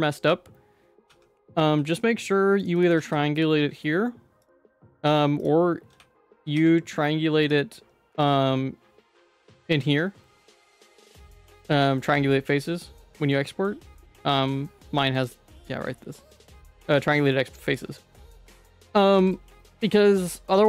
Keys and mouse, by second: 1.1 q, 1.6 q, 2.6 click, 4.4 click, 4.7 q, 5.9 q, 6.3 ctrl+z, 6.5 q, 19.2 ctrl+s.